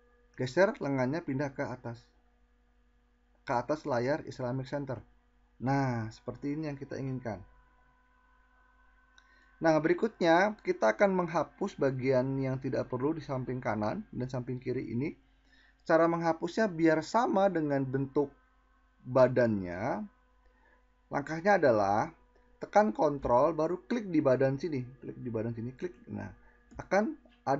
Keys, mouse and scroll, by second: 10.6-13.6 drag.